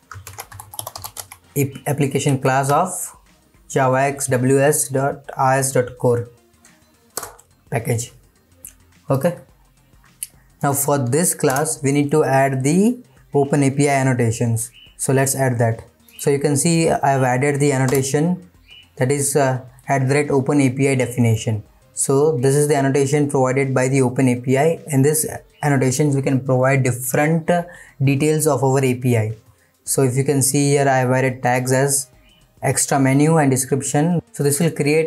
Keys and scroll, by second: 7.2 Return, 16.0 Return.